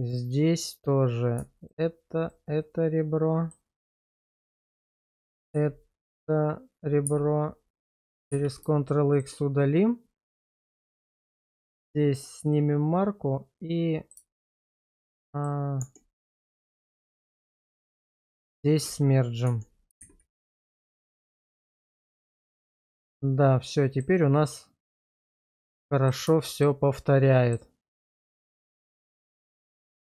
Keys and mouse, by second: 0.1 click, 2.6 middle click, 5.5 q, 7.1 x, 8.3 ctrl+x, 8.9 shift+middle click, 11.1 shift+click, 11.5 q, 12.5-14.1 middle drag, 14.4 shift+middle click, 15.0 middle click, 15.8 Tab, 17.4 1, 18.9 1, 19.5 Tab, 20.0 shift+z, 20.9-21.6 middle drag, 21.9 shift+middle click, 22.4-24.0 middle drag, 25.5-26.1 middle drag, 26.4 shift+middle click, 27.3 middle click, 28.1 middle click, 29.0 click, 29.5 shift+middle click, 29.9 middle click.